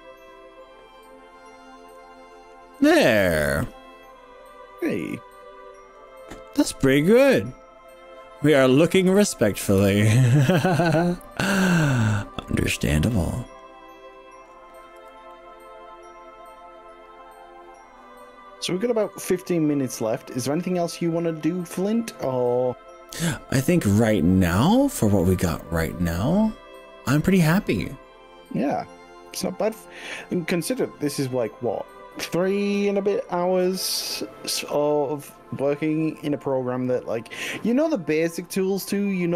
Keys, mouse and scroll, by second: 2.8-3.6 scroll down 6, 3.7-5.6 middle drag, 5.8 middle click, 7.4 z, 9.2 middle click, 9.8 z, 10.2 middle click, 10.8-12.1 middle drag, 12.4 scroll up 4, 13.2-14.5 middle drag, 13.2 scroll up 1, 15.0 3, 15.4-17.8 middle drag, 22.0-25.4 middle drag, 25.6 scroll down 2, 25.8-29.0 middle drag, 30.0-39.3 middle drag.